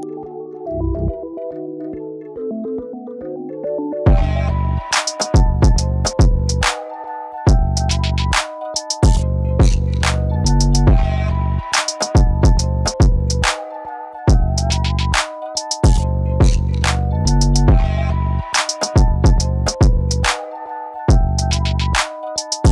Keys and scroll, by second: 11.7 alt+Tab, 11.9 space, 18.3 ctrl+t.